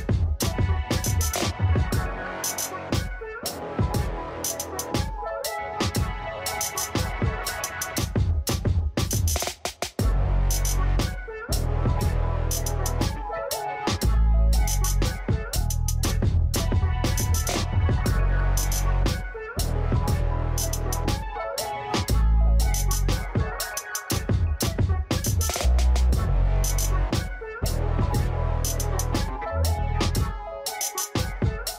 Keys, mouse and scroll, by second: 0.0-1.8 scroll down 6.